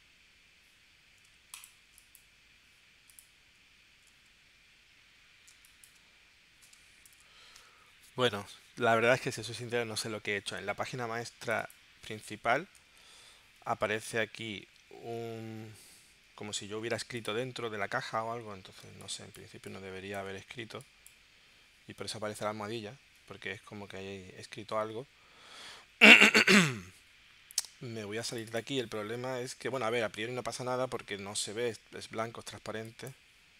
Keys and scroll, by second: 5.5 space, 6.0 space, 18.8 space, 20.6 space, 30.6 w.